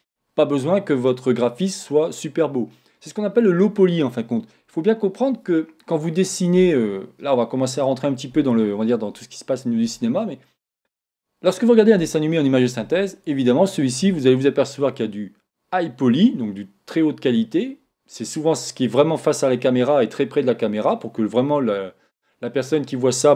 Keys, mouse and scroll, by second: 0.1-2.0 scroll up 2, 2.0 scroll up 1.